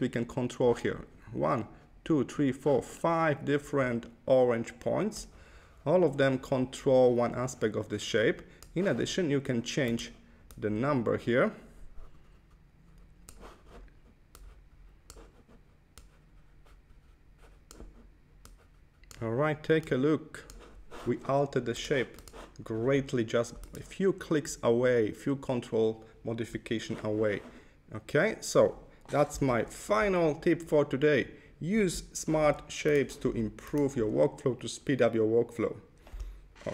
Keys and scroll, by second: 29.5 super+-, 32.3 Left, 33.1 Left.